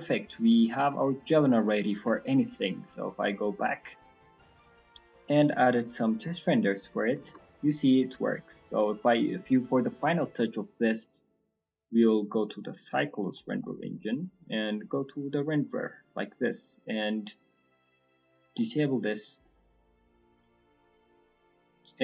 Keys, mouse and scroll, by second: 0.0 middle click, 0.3-0.8 scroll up 3, 0.7 middle click, 1.0 middle click, 1.7 middle click, 2.1 shift+middle click, 2.2 shift+middle click, 3.1 click.